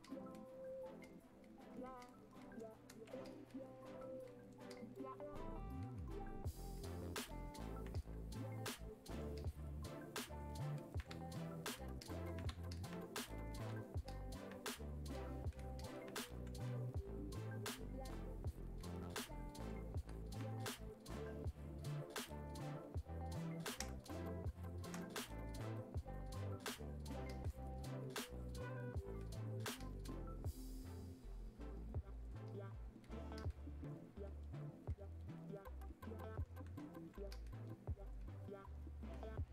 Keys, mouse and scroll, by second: 23.9 space, 24.3 click, 24.4 space, 25.2-39.5 drag.